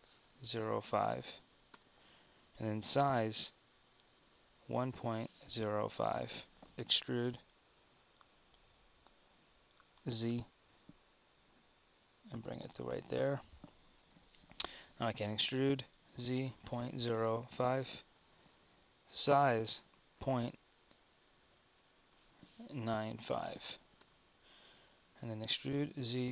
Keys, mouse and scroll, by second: 2.9 s, 6.7 super+z, 6.9 e, 14.7 click, 15.4 e, 19.1 s, 25.5 e.